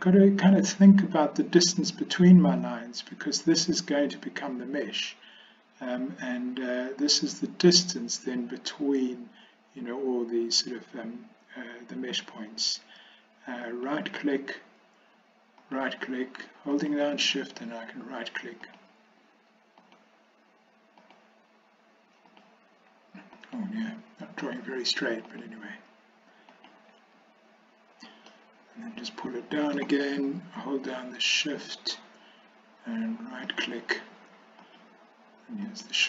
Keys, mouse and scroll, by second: 13.7 ctrl+right click, 15.6 ctrl+right click, 21.1 ctrl+right click, 22.3 ctrl+right click, 23.5 ctrl+right click, 25.3 ctrl+right click, 26.6 ctrl+right click, 28.4-29.8 shift+middle drag, 33.5 ctrl+right click, 35.7 ctrl+right click.